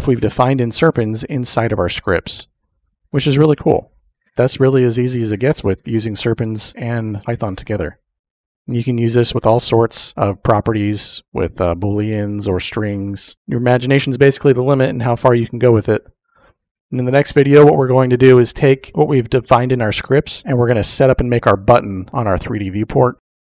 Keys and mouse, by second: 3.0-4.3 drag, 22.1-23.3 drag.